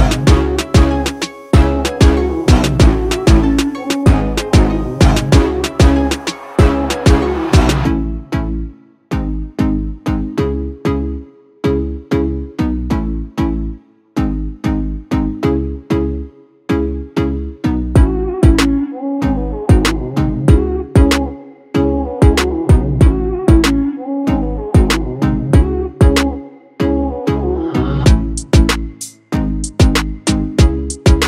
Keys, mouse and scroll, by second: 0.1 space, 0.3 click, 0.7 space, 0.9 ctrl+click, 2.2 ctrl+click, 13.1-15.0 drag, 15.0 space, 15.1 click, 15.5 space, 17.0-19.2 drag, 19.3 space, 19.5 click, 28.8 click, 29.4-29.7 alt+scroll down 1, 29.7 space, 29.8 click, 30.2 space, 30.6-31.2 ctrl+drag.